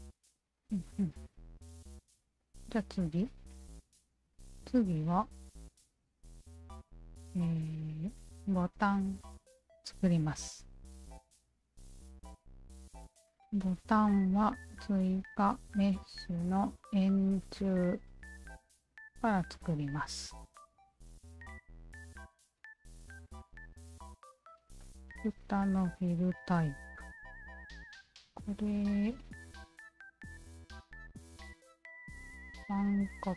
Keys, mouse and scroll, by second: 0.6-1.8 alt+drag, 2.4-2.9 drag, 3.1-4.2 alt+drag, 5.4 alt+click, 6.5 alt+click, 7.7 alt+click, 8.4 alt+click, 12.4 click, 14.8 alt+click, 15.6 alt+click, 18.4 alt+click, 21.3 alt+click, 22.0 alt+click, 22.6-23.0 alt+middle drag, 23.3-24.3 alt+right drag, 24.3 alt+middle drag, 24.8-25.4 alt+drag, 27.6 alt+click, 28.8 alt+click, 31.4 alt+click.